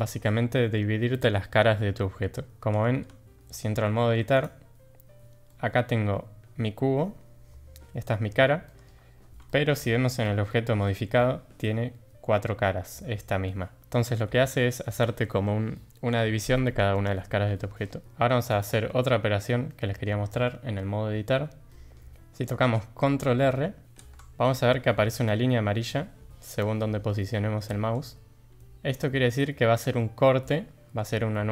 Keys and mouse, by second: 3.1 Tab, 3.7 click, 4.3 click, 5.5 click, 8.7 middle click, 9.5 shift+middle click, 9.8 middle click, 14.5 shift+middle click, 17.1 middle click, 19.7-20.0 middle drag, 21.7 middle click, 23.8 ctrl+r.